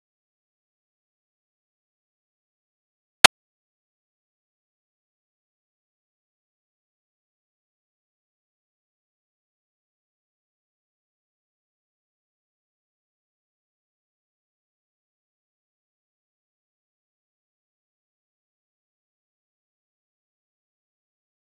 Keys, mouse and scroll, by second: 0.0 click, 0.4-1.0 scroll up 1, 1.0 ctrl+b, 2.0 z, 5.8 middle click, 6.4-8.7 scroll down 4, 8.8 ctrl+alt+b, 9.5-11.6 drag, 11.6-12.0 shift+middle drag, 12.0-13.7 drag, 13.7-14.0 middle drag, 14.0 drag, 14.1-14.5 scroll up 1, 14.5-16.7 drag, 18.9 ctrl+b, 20.9 middle drag, 21.1-21.5 scroll up 4.